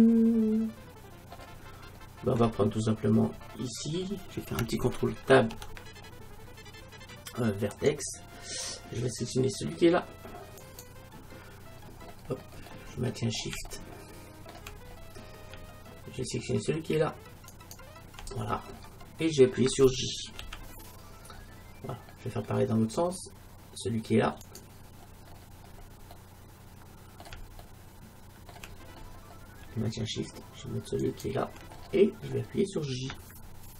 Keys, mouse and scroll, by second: 1.8-5.3 middle drag, 5.3 ctrl+Tab, 10.6-12.8 right drag, 12.3 middle click, 12.5 middle click, 14.4-16.9 middle drag, 16.9 scroll up 1, 17.6-19.4 right drag, 18.4 middle click, 20.5 j, 24.5-26.3 right drag, 25.3-27.1 middle drag, 31.0 scroll up 1, 31.1-33.0 right drag.